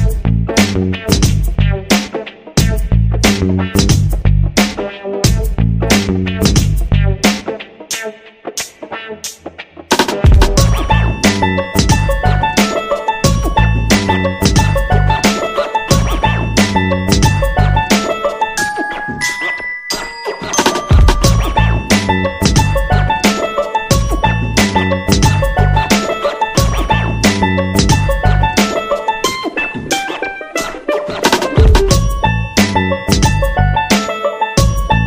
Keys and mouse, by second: 0.6 g, 1.3 middle click, 1.9-2.9 middle drag, 3.0 KP_3, 4.4 middle click, 5.0 middle click, 6.2 g, 6.6 r, 7.8 middle click, 8.1 KP_3, 8.4 shift+middle click, 9.2 right click, 10.0 ctrl+l, 10.3 KP_3, 11.3 middle click, 11.8 shift+middle click, 12.9 shift+d, 14.1 s, 15.0 middle click, 15.9 g, 16.6 middle click, 17.7-19.0 middle drag, 19.4 r, 20.4 middle click, 20.8 middle click, 21.4 r, 22.0 middle click, 22.8-26.1 typing, 27.3 r, 28.2 g, 29.7-30.4 shift+middle drag, 31.3 shift+d, 32.4 r, 33.7 r.